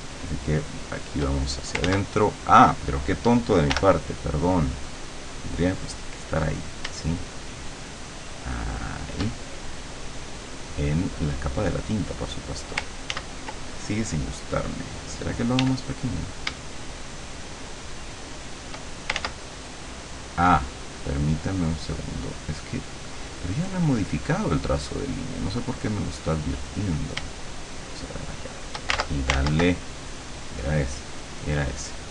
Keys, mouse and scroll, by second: 1.9 ctrl+z, 3.7 l, 4.9 click, 7.3-9.3 shift+drag, 13.2 ctrl+z, 15.7 d, 16.9-18.8 shift+drag, 19.3 ctrl+shift+z, 20.7 click, 23.2 click, 24.3 click, 26.2 click, 27.7-28.9 shift+drag, 29.4 ctrl+z, 30.7 click, 31.5 click.